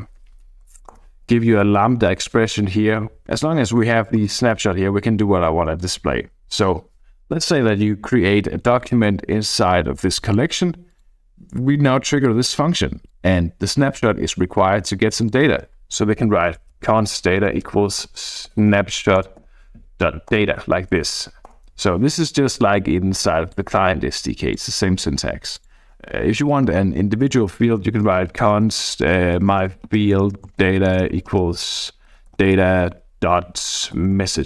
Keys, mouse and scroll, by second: 0.7 {, 0.9 Return, 1.9 Down, 3.2 click, 4.1 click, 5.8 click, 10.1-11.3 drag, 12.2 click, 15.2 click, 15.9-19.4 typing, 20.3 Return, 21.2 shift+;, 21.4 Return, 23.5-24.9 drag, 25.5 click, 27.9-34.4 typing.